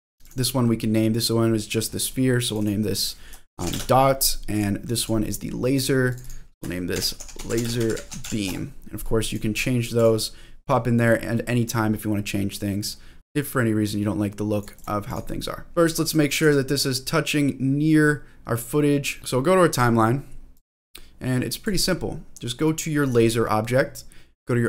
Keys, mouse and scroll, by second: 0.2 click, 0.6-1.0 scroll down 1, 1.0 middle click, 1.4-2.5 scroll down 1, 2.5-4.6 drag, 2.5 scroll down 1, 5.0 click, 6.1-9.1 drag, 9.3 click, 9.5 click, 9.9 click, 11.2 middle click, 11.9-12.6 scroll up 1, 12.9 scroll up 2, 13.4-14.6 drag, 14.7 click, 15.1 click, 15.7 shift+middle click, 15.7-16.0 scroll up 2, 16.0 click, 16.4 g, 19.2 click, 19.2 scroll down 1, 20.6-21.6 drag, 23.0 click.